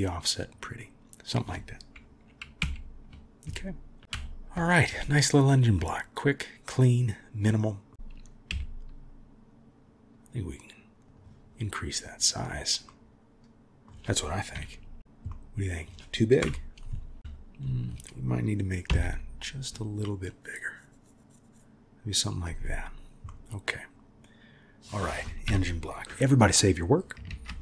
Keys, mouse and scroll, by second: 2.6 KP_1, 4.0 KP_3, 4.1 KP_1, 5.9-7.3 drag, 7.3 middle click, 7.9 KP_1, 8.5 s, 13.0 middle click, 14.5 KP_3, 15.4 middle click, 16.4 KP_1, 18.9 s, 23.3 click, 23.4-24.9 middle drag, 25.4 KP_3, 27.3 ctrl+s.